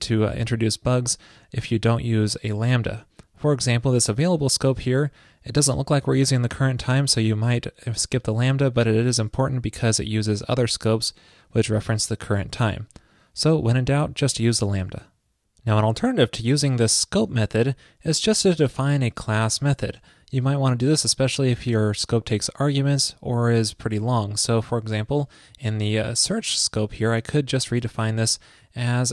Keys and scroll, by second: 27.8 super+v.